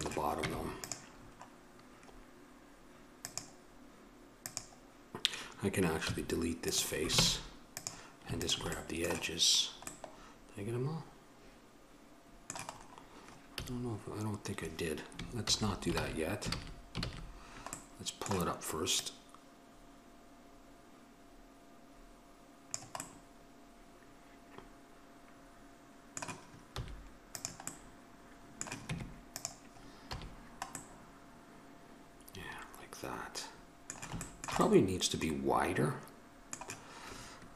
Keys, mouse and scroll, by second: 0.6 Tab, 7.4 ctrl+Tab, 8.6-10.8 drag, 10.8-12.5 middle drag, 13.0 middle click, 13.8 a, 15.6 ctrl+z, 20.6 click, 23.2-27.0 middle drag, 27.0 x, 29.1 Tab, 30.3 a.